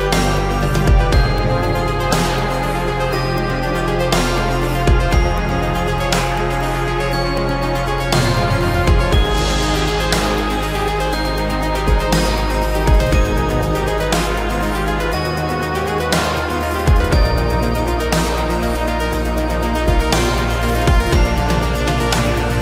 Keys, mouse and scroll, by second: 0.2 shift+middle click, 0.4 shift+double middle click, 2.3 space, 3.3 shift+middle click, 4.6 shift+middle click, 16.5 shift+middle click.